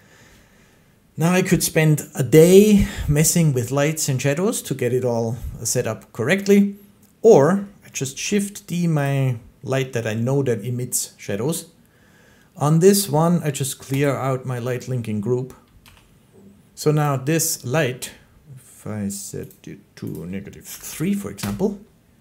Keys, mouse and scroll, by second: 6.4 click, 8.0 d, 8.9 click, 13.9 click, 15.7 g, 16.9 click, 19.3 click, 20.0 click, 20.6 typing, 21.2 Return.